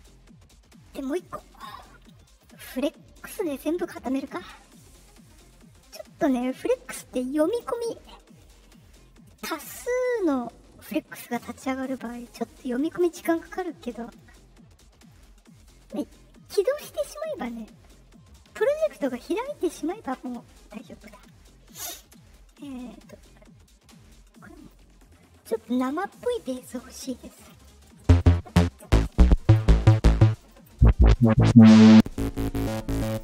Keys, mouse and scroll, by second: 1.7 click, 4.3-4.7 drag, 16.7-17.2 drag, 24.5 click, 25.6 click, 27.3 click, 30.3 click, 31.4 click, 33.0 click.